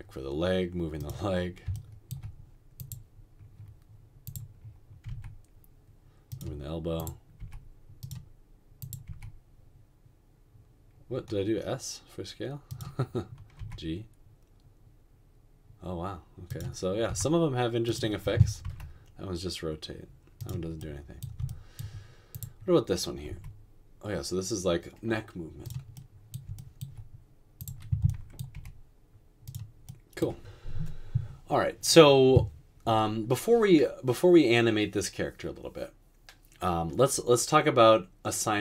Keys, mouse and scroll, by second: 5.1 typing, 7.4 typing, 9.0 typing, 13.6 typing, 17.1 typing, 18.6 typing, 23.3 r, 28.6 g.